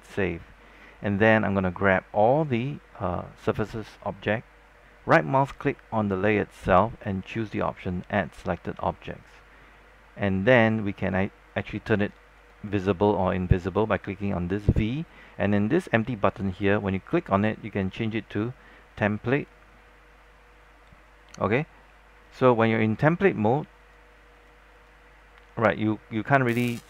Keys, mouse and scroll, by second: 5.8-9.3 right drag, 11.2 click.